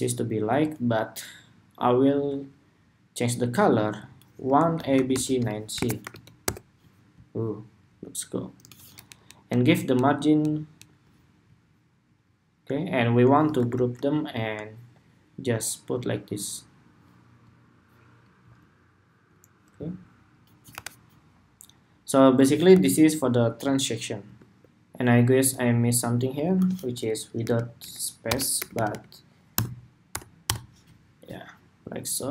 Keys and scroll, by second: 8.8 alt+Down, 9.3 alt+Down, 10.3 alt+Down, 10.9 alt+Down, 13.3 super+g, 20.4 super+-, 22.4 super+=, 24.3 shift+super+2.